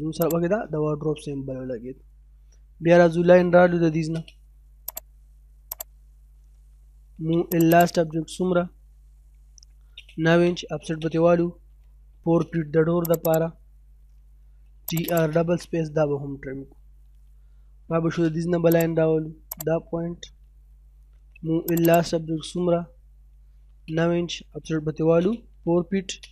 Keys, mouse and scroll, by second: 0.2 right click, 0.8 middle click, 3.6 l, 3.8 space, 4.0-4.9 scroll up 1, 4.9 click, 6.7 m, 6.9 space, 7.1 l, 7.3 space, 7.5 right click, 7.8 click, 9.4-12.0 typing, 12.5-13.1 scroll up 1, 13.1 click, 14.0-14.9 typing, 14.9 click, 15.4-15.8 scroll down 1, 15.8 middle click, 16.2-17.2 scroll up 1, 17.5 l, 17.8 space, 18.0-18.5 scroll up 1, 18.7 click, 20.8 m, 20.9 space, 21.2 l, 21.4 space, 21.6 right click, 21.9 click, 23.3 9, 23.5 space, 24.6-26.3 typing, 26.1-26.3 scroll up 1.